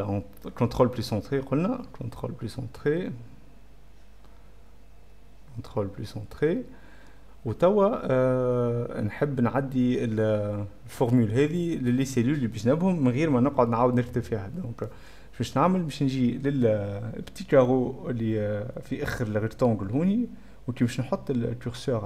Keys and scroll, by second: 0.2-1.0 typing, 2.5 ctrl+Return, 3.8-4.6 typing, 5.4 ctrl+z, 5.5 ctrl+m, 5.6 ctrl+;, 5.6 ctrl+', 5.7 ctrl+Return, 6.4 v.